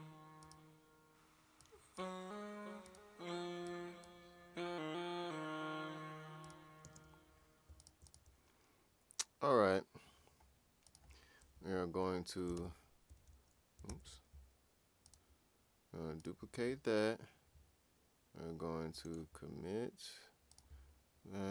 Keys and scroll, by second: 12.5 ctrl+\, 13.9 super+z.